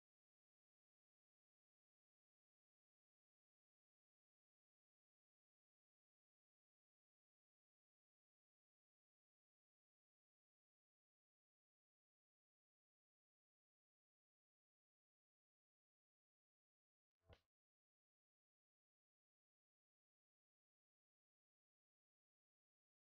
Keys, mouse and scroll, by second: 0.1 alt+middle click, 0.6 alt+click, 1.0 alt+middle click, 5.2 BackSpace, 5.4-5.9 scroll down 1, 6.1 alt+middle click, 6.4 alt+click, 8.3 BackSpace, 8.4 scroll down 1, 9.1 alt+middle click, 9.7 alt+click, 10.4 alt+middle click, 10.8-11.5 alt+scroll down 2, 11.7 alt+click, 12.5 alt+middle click, 12.8 alt+click, 13.5 alt+middle click, 13.9 alt+click, 14.6-15.0 alt+scroll up 2, 15.8 ctrl+a, 16.1 ctrl+right click, 19.3-19.6 scroll up 1, 19.8 alt+click, 21.0 alt+click.